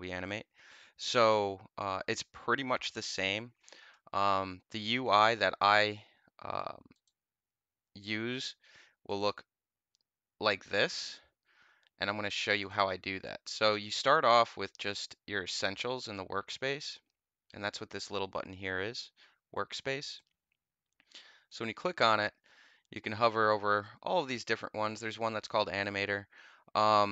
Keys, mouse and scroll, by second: 6.8 click, 9.0 click, 12.5 click, 16.7 click, 20.0 click, 24.8 click.